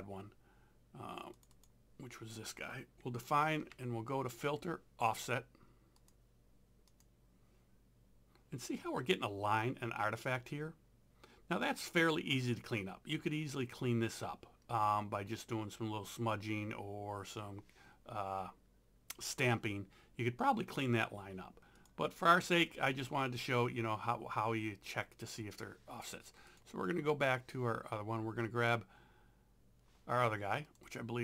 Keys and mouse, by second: 4.4 click, 6.0 click, 21.8 click, 25.2 click, 30.7 click.